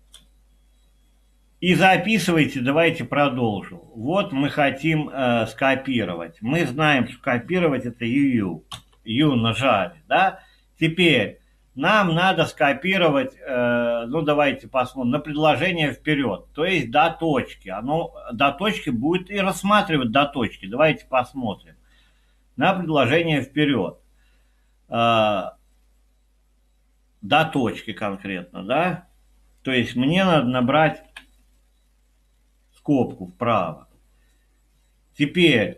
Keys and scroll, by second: 8.7 y, 31.0 ).